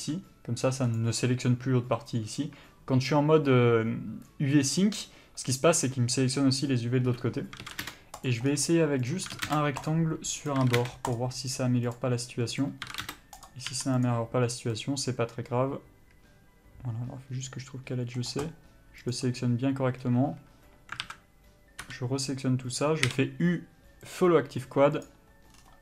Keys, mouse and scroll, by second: 0.1 g, 1.1 right click, 7.7 s, 8.4 click, 9.5 s, 10.1 click, 10.8 s, 11.3 click, 13.0 s, 13.6 click, 14.9 middle click, 19.3 click, 20.2-21.2 scroll down 1, 21.2 alt+a, 22.0 l, 25.2 u.